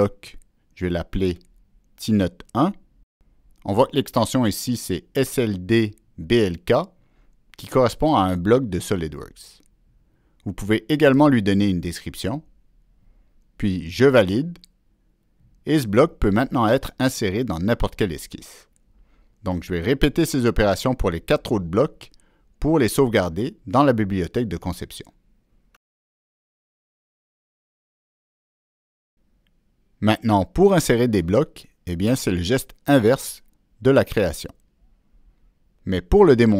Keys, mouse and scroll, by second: 3.6 Return, 13.8 Return, 14.8 Return, 14.8 click, 32.9 click, 34.6 ctrl+c, 35.4 click.